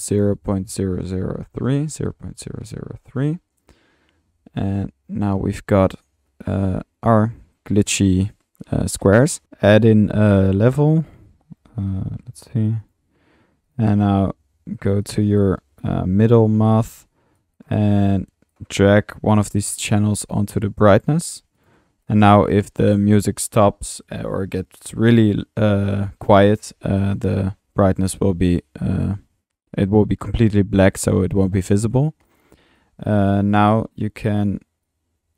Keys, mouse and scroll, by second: 4.1-5.4 middle drag, 5.7 middle click, 8.6 middle click, 8.8-9.9 typing, 9.4 Escape, 9.4 click, 10.1-11.0 drag, 10.6 Tab, 11.4-12.5 typing, 12.8-14.0 drag, 14.0 middle click, 14.1 click, 14.7 click, 16.8-17.1 drag, 17.4 click, 17.6-18.0 drag, 18.1 click, 19.6-21.2 drag, 21.3 click, 22.0-22.7 drag, 27.0 middle click, 31.4-32.5 drag, 32.8-33.9 drag, 34.8-35.3 drag.